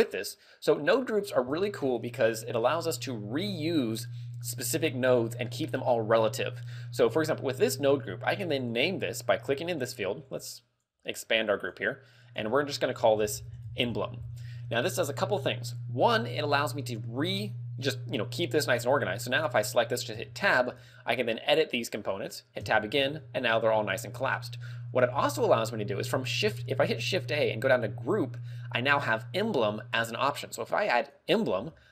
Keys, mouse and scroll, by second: 0.4 right click, 1.2-1.9 scroll up 6, 8.6 click, 10.0 click, 10.4 click, 11.2 click, 12.3 click, 17.0 click, 20.2 Tab, 20.7-21.5 scroll down 4, 21.8 middle click, 22.7 Tab, 23.5 middle click, 26.5 shift+a, 31.8 g.